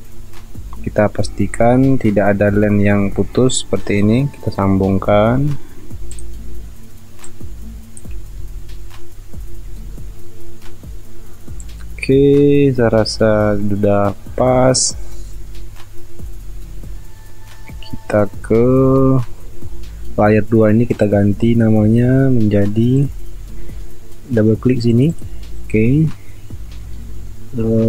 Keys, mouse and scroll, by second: 0.2 alt+scroll up 1, 8.6 alt+scroll down 1, 11.3 alt+scroll up 1, 11.8 alt+scroll down 1, 13.6 alt+scroll up 1, 15.3-15.6 alt+scroll down 1, 16.1 alt+scroll up 1, 17.3 alt+scroll down 1, 18.4 alt+scroll up 1.